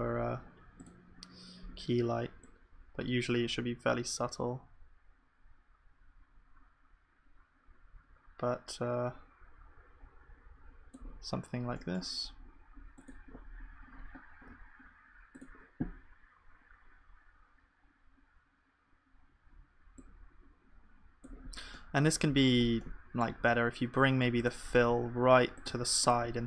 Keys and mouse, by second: 11.2-14.0 middle drag, 21.5-25.5 middle drag.